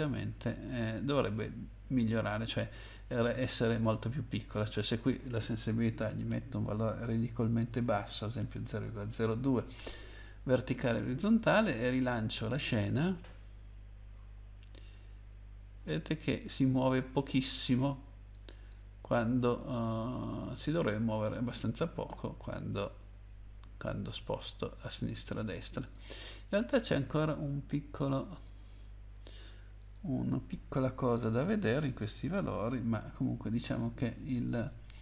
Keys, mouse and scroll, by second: 2.8 click, 4.5 click, 6.3 0, 7.3 Up, 7.7 Left, 8.4 0, 12.2 click, 18.3 click, 25.8 click, 26.9 click, 28.3 click, 29.8 click, 31.0 BackSpace, 31.2 BackSpace, 32.3 2, 34.2 Right.